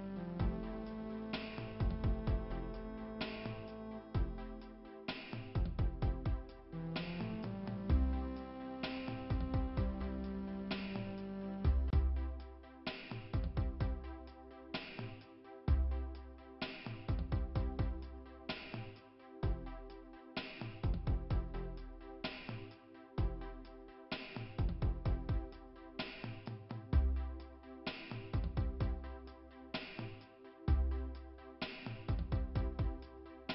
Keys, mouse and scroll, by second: 0.0 click, 2.0 click, 3.4 click, 4.1 right click, 6.0 click, 6.8 click, 8.0 click, 9.1 click, 10.7 click.